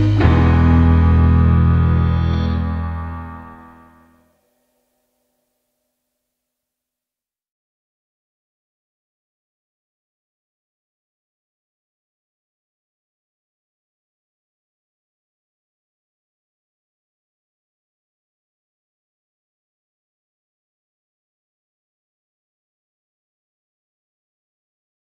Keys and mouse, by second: 3.3 click, 4.3 shift+click, 5.4-9.5 right drag, 9.5 click, 10.9 shift+click, 11.9 j, 16.0 click, 17.3 g, 21.5 click, 22.3 shift+click, 23.2-25.1 right drag.